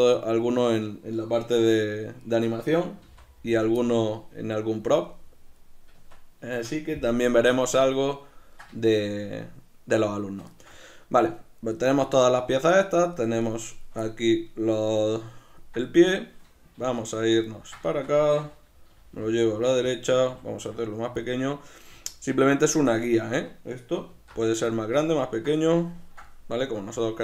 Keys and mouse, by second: 3.0 g, 3.7 click, 3.8-6.5 middle drag, 6.0 Tab, 7.1 KP_Decimal, 7.3 middle click, 12.2-14.0 shift+right drag, 14.0-15.3 middle drag, 16.8 alt+q, 17.4 ctrl+middle click, 18.9 g, 19.9 click, 20.3 s, 21.2 click, 21.9 g, 22.9 click, 24.1 alt+q, 24.7-27.2 shift+middle drag.